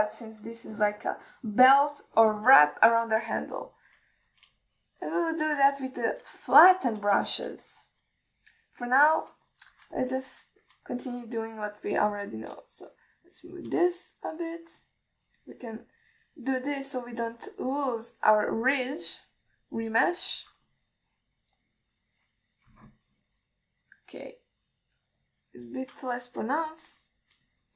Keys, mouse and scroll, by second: 2.0 alt+middle click, 3.2 alt+middle click, 4.0 ctrl+alt+middle click, 4.5 click, 4.9 click, 5.4 alt+middle click, 5.8-6.7 shift+drag, 7.0-7.4 middle drag, 7.6 ctrl+middle drag, 8.1 middle click, 8.5 shift+middle click, 9.1 ctrl+alt+middle click, 9.6 alt+middle click, 10.3 middle click, 10.7 shift+middle click, 11.2 ctrl+alt+middle click, 11.5 middle click, 12.1 alt+shift+middle click, 13.0 alt+middle drag, 13.4 ctrl+middle click, 13.9-14.9 shift+drag, 15.2-15.6 middle drag, 16.0 alt+middle click, 16.6 click, 17.5-18.6 middle drag, 18.9 click, 19.4 click, 19.8 click, 20.5 click, 21.6 ctrl+alt+middle click, 22.0-22.6 alt+middle drag, 24.4-26.5 scroll down 1, 26.5 click.